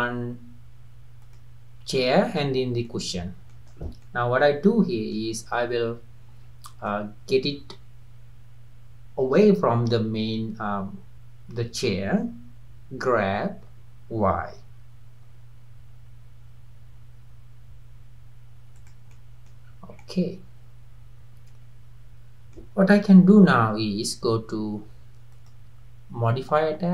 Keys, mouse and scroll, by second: 1.2 click, 2.2 click, 2.9 middle click, 3.7 scroll down 2, 4.1-6.4 middle drag, 6.4-6.9 scroll up 1, 6.9-10.0 middle drag, 13.6 g, 19.1 middle click, 19.7-20.0 scroll up 3, 20.0-23.0 middle drag, 25.4 click.